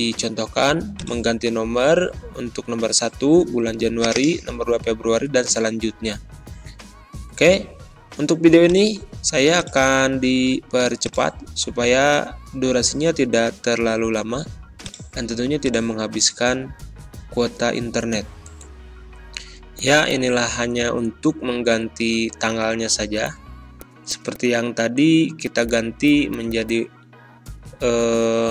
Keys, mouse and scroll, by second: 0.9 click, 1.8 BackSpace, 4.0 click, 4.8-7.2 typing, 8.5 click, 12.2 alt+Tab, 13.2 alt+Tab, 14.7-18.7 drag, 18.7 ctrl+c, 18.9 alt+Tab, 20.3 ctrl+scroll up 1, 20.7 scroll down 1, 22.0 ctrl+v, 23.2-24.7 drag, 24.7 2, 25.4 click, 27.0 Delete, 27.5 BackSpace, 28.0 ctrl+scroll up 1.